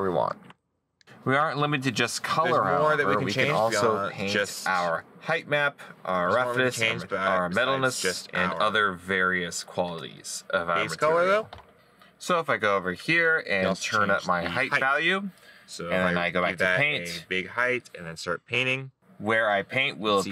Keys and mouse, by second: 0.0 middle click, 1.9 right click.